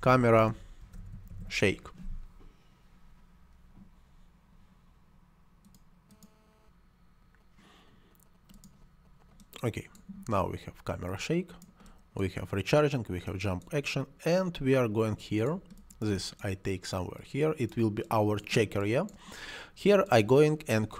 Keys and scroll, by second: 0.0-2.4 typing.